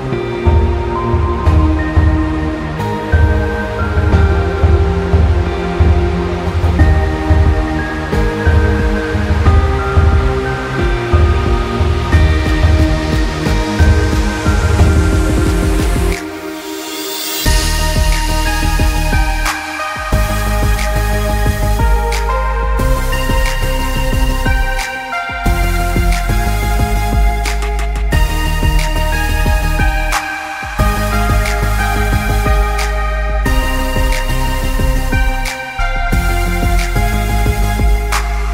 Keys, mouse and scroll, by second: 6.1 click, 7.6 alt+scroll down 1, 8.7 space, 8.9 click, 9.1 space, 14.1 alt+scroll up 1, 16.7 scroll up 1, 20.7 click, 24.4 click, 33.2 click, 34.1 alt+scroll up 1, 35.0 click.